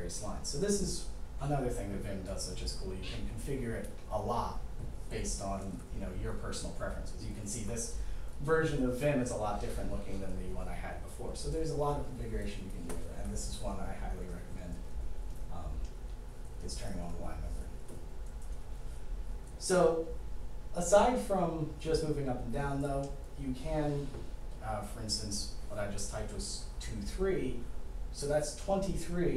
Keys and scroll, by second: 19.4 2, 21.2 3.